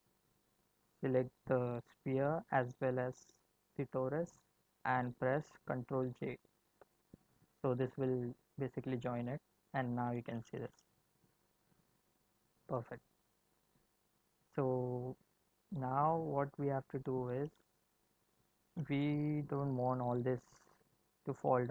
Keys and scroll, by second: 6.7 ctrl+j, 8.3 space, 11.7 space.